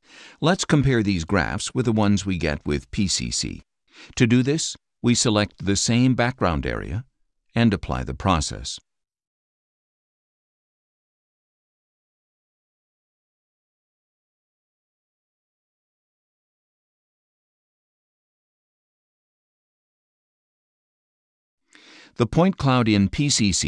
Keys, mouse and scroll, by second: 2.8-6.8 ctrl+drag, 9.3 click, 21.8-22.9 drag.